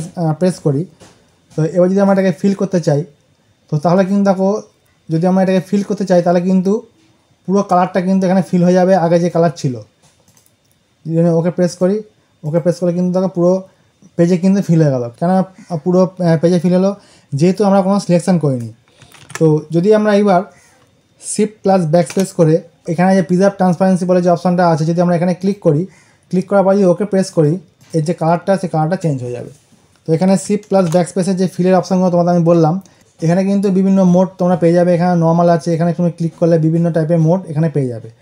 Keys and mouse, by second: 9.1 click, 19.1 ctrl+z, 25.3 click, 29.8 click, 35.5 click.